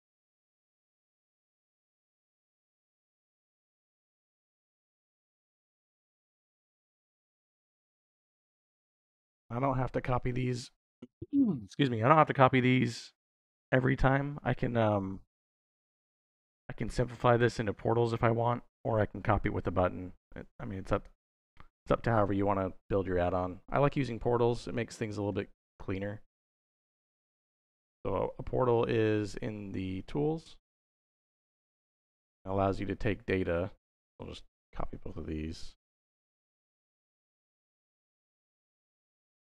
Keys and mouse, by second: 2.7 middle click, 4.5 middle click, 5.3-8.0 drag, 9.2-10.3 drag, 14.8 middle click, 15.7 middle click, 20.8 click, 21.8 middle click, 23.0 middle click, 23.5 click, 24.5 middle click, 25.1 middle click, 26.1 click, 26.9 shift+a, 32.4 middle click, 33.2-34.5 drag, 37.9 click.